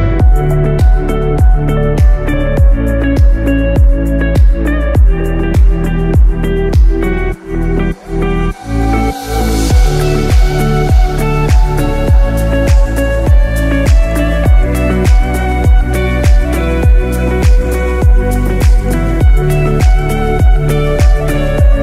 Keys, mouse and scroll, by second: 0.1-0.4 scroll up 3, 0.9 alt+z, 2.0-2.5 scroll down 2, 2.5 click, 4.2 scroll up 1, 4.5 scroll down 1, 4.8 middle click, 6.4 e, 21.2 scroll down 6.